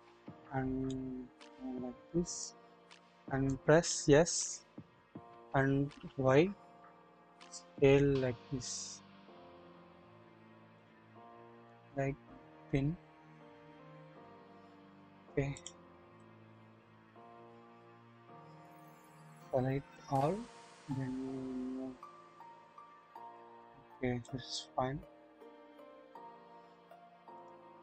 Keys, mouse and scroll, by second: 0.9-2.4 drag, 3.5 click, 4.8 s, 11.7 click, 14.9 click, 15.6 click, 16.2-18.8 drag, 20.0 a, 21.3-23.4 drag, 23.1 typing, 24.2-25.8 drag, 26.0-27.2 scroll down 1, 27.2 typing, 27.3 click.